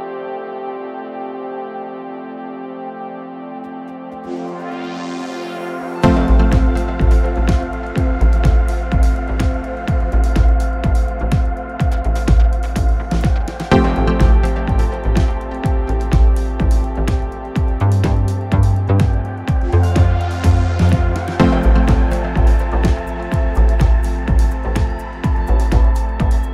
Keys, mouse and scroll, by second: 0.0 middle click, 1.1 scroll up 1, 1.1 middle click, 1.5 Tab, 1.8 drag, 1.9 middle click, 2.1 scroll up 1, 2.1-2.9 middle drag, 2.9 scroll down 3, 3.1 middle drag, 3.3 scroll up 3, 3.4 scroll down 1, 3.5-4.6 middle drag, 4.6 click, 4.7-5.7 right drag, 5.7 click, 5.8-6.8 middle drag, 6.8-8.3 drag, 8.3 middle click, 9.3 click, 9.5-9.8 middle drag, 9.8-10.1 scroll down 3, 10.1 middle click, 10.3 scroll up 1, 10.4 scroll down 1, 10.6 click, 10.8 Tab, 11.2 middle click, 11.4 scroll up 2, 11.5 scroll down 3, 12.7-13.9 shift+drag, 13.9 f, 14.5-16.9 shift+drag, 16.9 f, 17.1 scroll up 2, 17.3 middle click, 17.9-20.8 shift+drag, 20.8 f, 21.2-22.5 drag, 23.0 f, 23.1-23.7 scroll up 10, 23.3 middle click, 23.7 click, 23.9 scroll down 8, 24.1 middle click, 24.8-25.2 scroll down 1, 25.2 click, 25.9 Tab, 26.4 click.